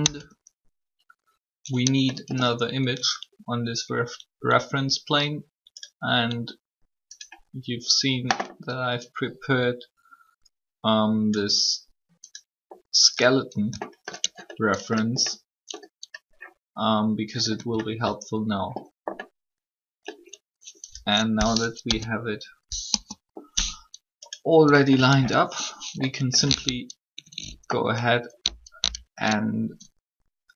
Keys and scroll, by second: 0.0 Tab, 14.2 shift+Tab, 21.7 1, 25.1 alt+a.